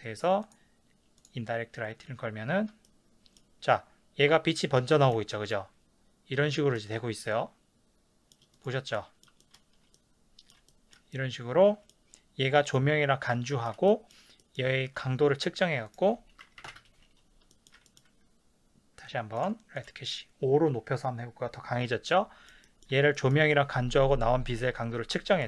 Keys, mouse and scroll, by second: 1.4-2.9 drag, 2.8 shift+scroll down 1, 2.9-8.5 shift+middle drag, 8.5 click, 8.9-12.7 middle drag, 12.7 click, 13.5-16.7 shift+middle drag, 16.7 click, 16.7 KP_5, 16.7 KP_Enter, 17.5-19.5 shift+middle drag, 19.8-22.1 drag, 22.1-25.4 middle drag.